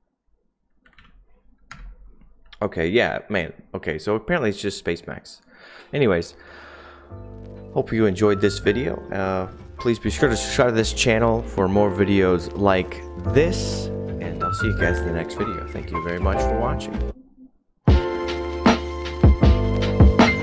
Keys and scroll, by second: 0.7-1.4 typing, 1.7 Return, 4.2 typing.